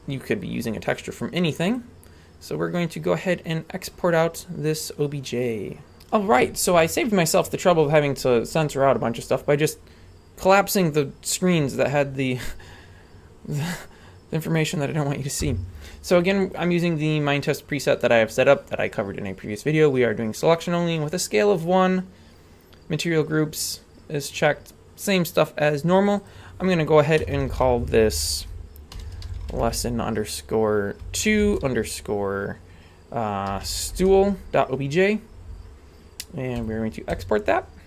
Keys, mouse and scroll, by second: 1.6-6.0 drag.